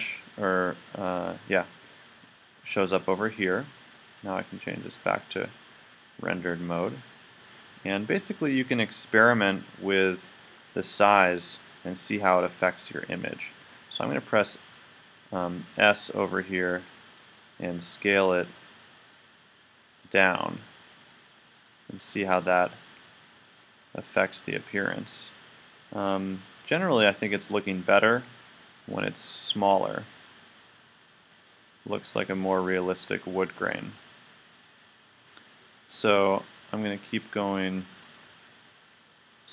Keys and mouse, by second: 15.7 s.